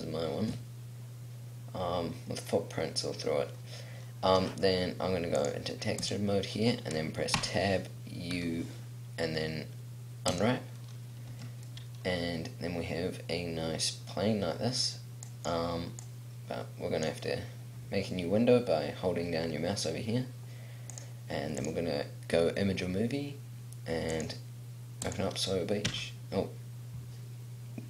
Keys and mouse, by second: 3.8 middle click, 7.6 Tab, 8.5 u, 11.5 Tab, 12.8 middle click, 13.5 middle click, 17.1 middle click, 26.1 Tab.